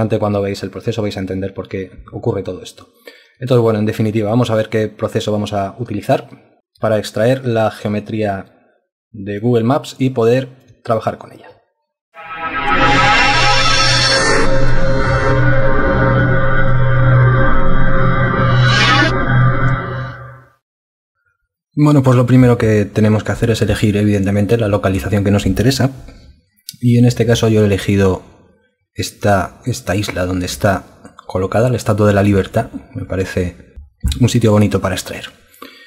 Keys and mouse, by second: 0.6 alt+double click, 3.6 alt+click, 7.0 alt+click, 8.4 alt+click, 8.8 alt+click, 9.7 alt+click, 10.1 alt+click, 10.2 alt+double click, 10.4 alt+click.